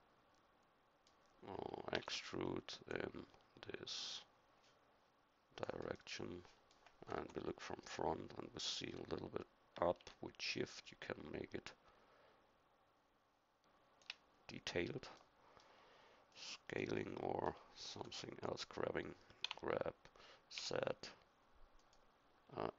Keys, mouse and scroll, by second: 1.9 e, 7.1 KP_1, 17.9 KP_1, 19.4 g.